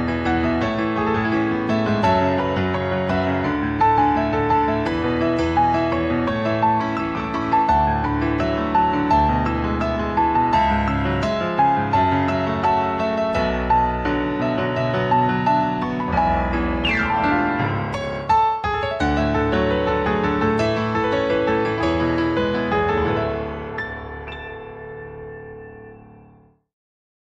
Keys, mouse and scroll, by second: 1.5 alt+click, 2.9 click, 4.6 ctrl+s.